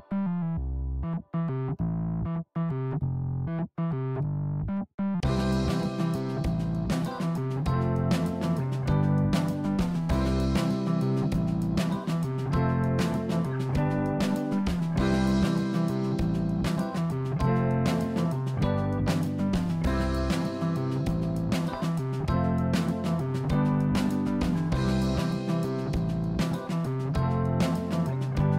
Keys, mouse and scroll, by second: 0.6 middle click, 1.3 scroll down 3, 1.6 middle click, 2.3 Tab, 2.8 click, 4.6 ctrl+b, 8.2 click, 8.6 Tab, 8.8 click, 9.2 click, 9.6 right click, 10.5 click, 11.1-12.8 middle drag, 13.1 Tab, 13.6 Tab, 13.8 click, 15.1 click, 15.6-17.4 scroll up 1, 17.4 shift+a, 19.9 click, 20.8 g, 23.4 g, 26.4 click, 27.4-28.5 drag.